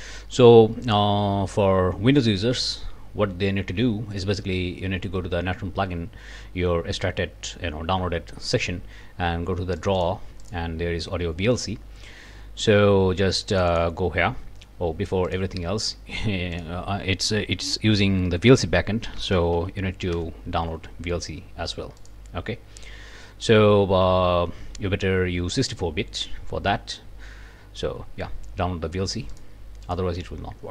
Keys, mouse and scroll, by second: 0.8 click, 2.6 click, 9.8 click, 10.4 click, 13.5 click, 15.3 click, 16.5 click, 18.9-20.0 typing, 20.1 Return, 22.0 click, 29.3 click, 29.8 click.